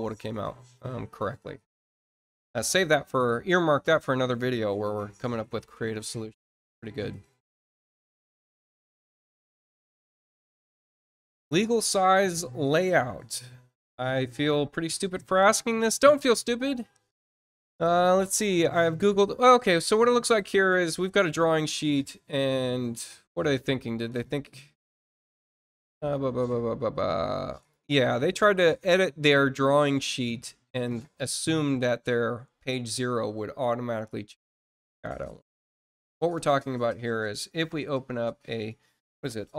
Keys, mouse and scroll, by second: 8.8 click, 11.5 click, 18.1 scroll down 4, 24.7 click, 27.6 click, 28.4 scroll up 1, 29.3-29.6 scroll down 1, 36.1 click.